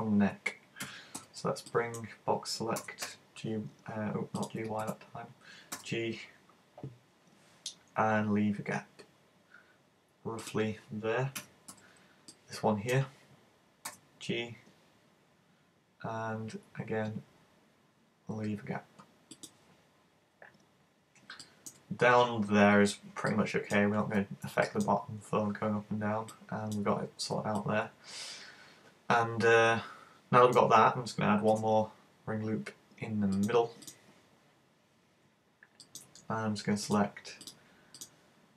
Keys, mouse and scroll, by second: 0.9 super+a, 1.2 b, 4.5 click, 4.8 super+z, 5.8 g, 10.5 click, 11.4 a, 11.7 b, 13.9 g, 19.5 click, 20.7-21.4 scroll down 5, 21.4 shift+middle click, 21.9 scroll up 3, 23.4 middle click, 25.0-26.2 scroll down 2, 26.3 middle click, 26.3 scroll down 1, 27.0 z, 27.6 middle click, 31.6 ctrl+r, 33.9 click, 35.9 right click, 36.9 shift+right click, 37.4 shift+right click, 38.0 shift+right click.